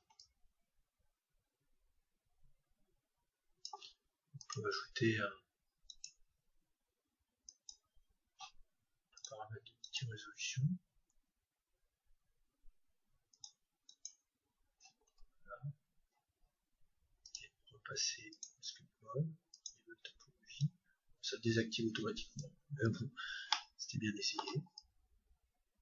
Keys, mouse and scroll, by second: 0.2-2.0 drag, 4.4-6.3 drag, 7.6-11.1 drag, 13.3-15.8 drag, 15.6-17.3 middle drag, 17.3-19.3 drag, 19.5-22.5 drag, 23.0-25.4 middle drag, 24.8-25.8 drag.